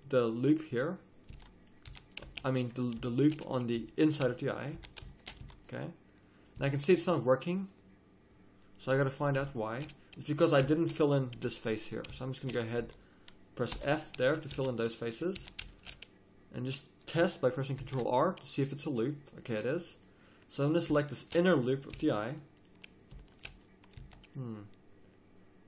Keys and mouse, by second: 1.3 z, 1.9 a, 3.2-4.8 middle drag, 4.8 a, 5.4 z, 6.6 z, 11.3 a, 12.8 z, 13.7 f, 14.5 z, 15.3 a, 17.8 ctrl+r, 21.9 z, 24.0 z, 24.7 click, 24.8 middle click.